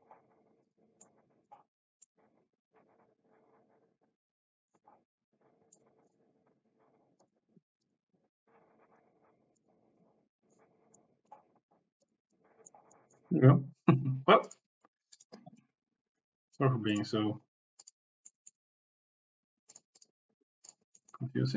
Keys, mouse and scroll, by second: 1.0 middle click, 2.0-4.7 middle drag, 5.8 middle click, 7.2 click, 8.3 s, 10.1 click, 11.1 click, 12.3 click, 12.9 click, 14.4-15.2 drag, 16.9 click, 17.9 click, 18.4 click, 19.7 click, 21.0 click.